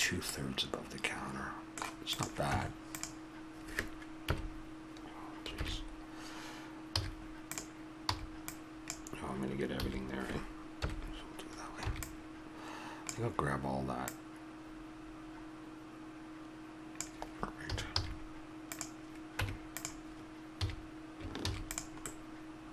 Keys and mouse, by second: 0.7-2.1 middle drag, 2.1-4.0 drag, 2.4 Tab, 4.2 KP_3, 5.5 ctrl+KP_3, 7.0 z, 8.1 b, 9.7 a, 10.8 KP_1, 11.9 b, 14.1 click, 17.7 a, 17.9 z, 19.4 Tab, 20.6 a, 21.4 ctrl+s.